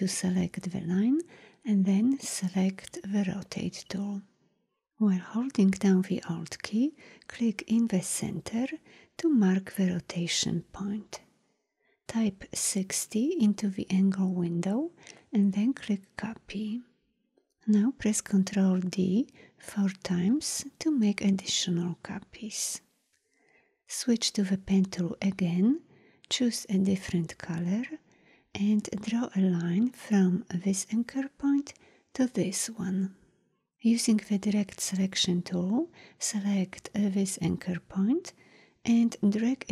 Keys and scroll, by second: 2.3 r, 18.2 ctrl+d, 24.5 p, 34.4 a.